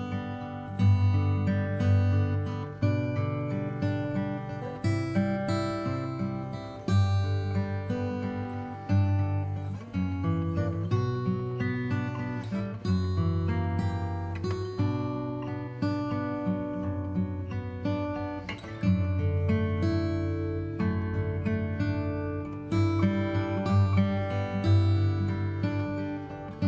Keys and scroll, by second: 3.0 KP_0, 14.4 space, 26.0 space.